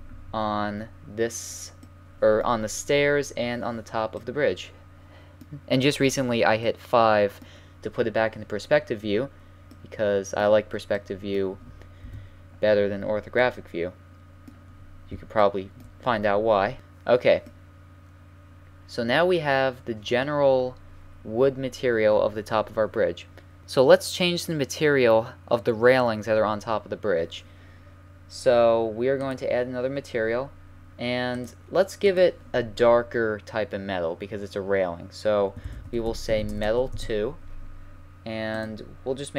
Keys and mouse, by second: 0.6 middle click, 6.6-12.0 middle drag, 12.0 KP_1, 17.5-23.6 middle drag, 29.3-31.0 drag, 31.3-33.9 drag, 38.6-39.3 drag.